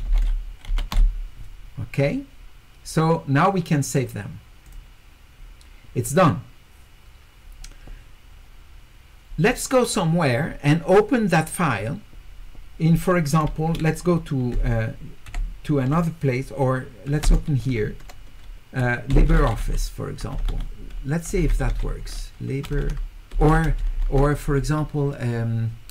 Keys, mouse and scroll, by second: 0.0-1.3 typing, 4.7 click, 17.2 space, 19.5-22.0 typing.